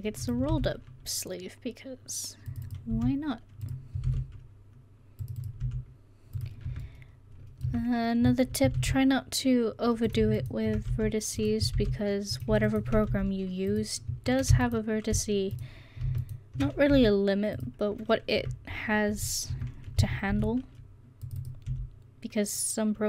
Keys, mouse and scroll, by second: 0.5 ctrl+r, 2.9 s, 4.1 ctrl+r, 5.7 s, 6.7 Tab, 7.7 Tab, 8.8 ctrl+r, 10.9 s, 11.8 ctrl+r, 13.1 s, 14.6 space, 15.0 space, 16.9 s, 18.4 Tab, 19.6 Tab, 20.3 ctrl+r, 21.7 s.